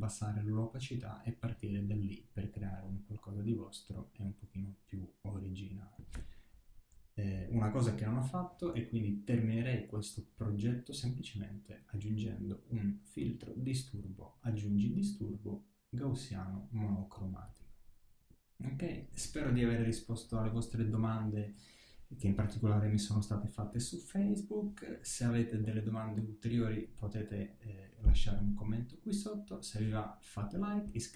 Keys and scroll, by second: 7.3 alt+shift+super+e.